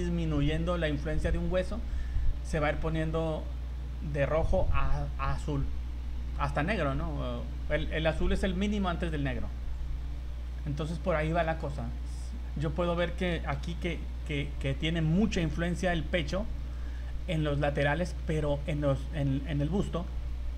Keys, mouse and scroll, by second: 10.7 scroll up 1, 11.4 middle click, 12.7 middle click, 13.6 v, 16.7 right click, 18.2 middle click, 19.6 middle click.